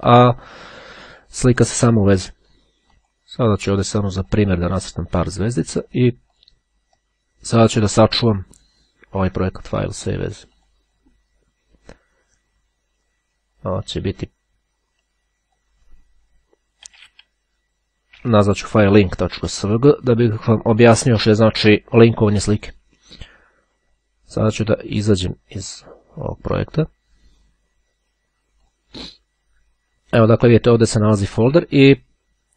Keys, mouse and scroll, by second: 0.3-1.2 scroll up 1, 1.7 click, 3.1 click, 3.9-4.9 drag, 6.5 click, 8.3 scroll down 1, 8.4 click, 9.7-11.3 drag, 13.7 click, 14.5-16.1 drag, 16.1-17.0 typing, 18.7 Return, 23.4-24.3 scroll down 2, 25.2-26.5 drag, 27.8 click, 28.8 click.